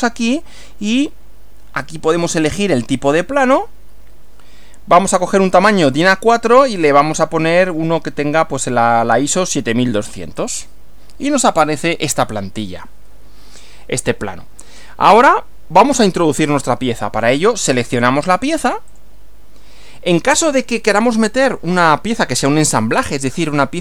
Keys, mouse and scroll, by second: 10.4 click, 18.9 click.